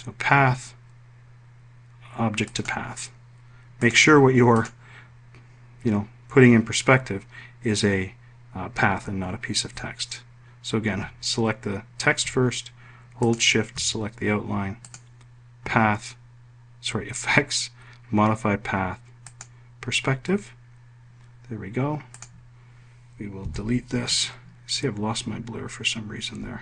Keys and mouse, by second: 0.4 click, 3.0 click, 4.3 click, 5.0 click, 13.7 shift+click, 15.3 click, 22.5 click, 24.0 Delete.